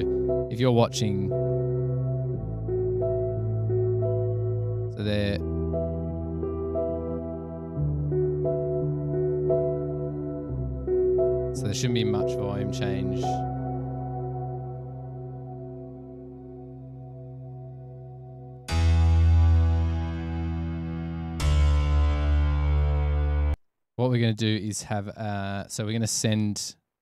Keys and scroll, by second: 23.6 space.